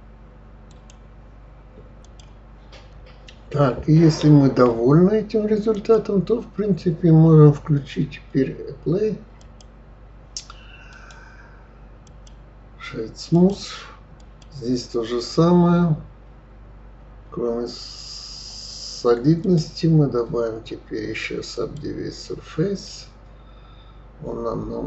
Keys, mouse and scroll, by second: 6.0 click, 9.7-10.6 drag, 11.2 right click, 12.6-13.6 right drag, 13.6 click, 14.5 click, 19.7-22.8 drag, 23.2-24.8 middle drag.